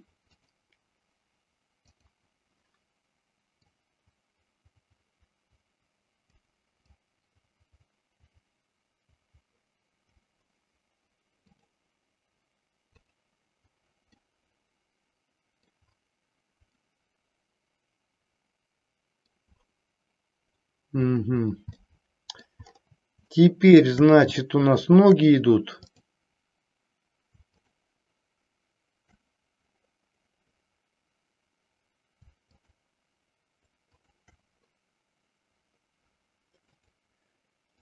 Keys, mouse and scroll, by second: 1.8 click, 4.0-6.3 drag, 6.7-10.1 drag, 11.6 click, 13.0 click, 14.2-15.7 middle drag, 16.7-19.3 middle drag, 21.8-22.6 middle drag, 23.2-23.8 shift+middle drag, 24.5 shift+middle click, 25.8-26.8 drag, 27.5-28.6 shift+drag, 34.0-35.0 shift+drag, 36.6-37.8 drag.